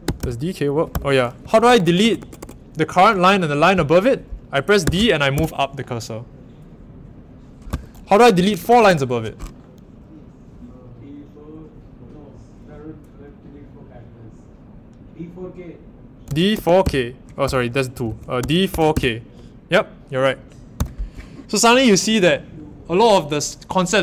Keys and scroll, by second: 0.0-2.3 typing, 4.8-5.3 typing, 8.0-9.3 typing, 16.0-19.4 typing, 20.7 typing.